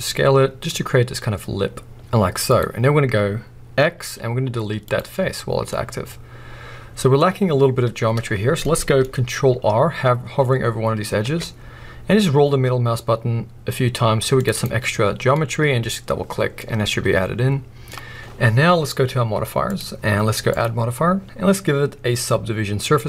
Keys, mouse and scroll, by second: 2.6 click, 4.0 x, 5.7 middle click, 7.1-8.5 scroll up 1, 8.6 middle click, 11.2 ctrl+r, 14.3 ctrl+r, 15.0-15.3 scroll down 2, 15.3 middle click, 15.9-16.5 scroll up 2, 16.5 scroll up 1, 16.6-18.2 middle drag, 18.2-19.6 scroll down 2, 19.6 click, 20.5-23.0 drag.